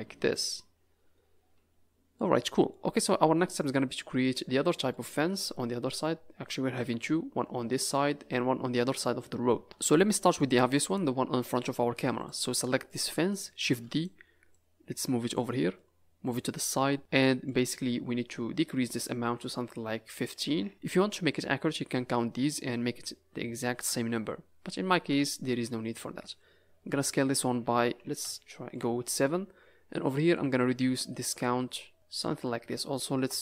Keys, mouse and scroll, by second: 2.1 middle click, 3.8-4.9 scroll down 8, 4.9 middle click, 6.0 scroll up 5, 9.6 middle click, 9.9 z, 11.0 scroll down 3, 12.1 click, 12.6 scroll down 2, 12.8 middle click, 13.6 shift+d, 14.5 click, 15.5 middle click, 16.2 click, 16.8 middle click, 17.0 scroll up 6, 17.2 middle click, 19.4 click, 23.6 s, 30.3 click, 32.2 Tab, 33.1 KP_0.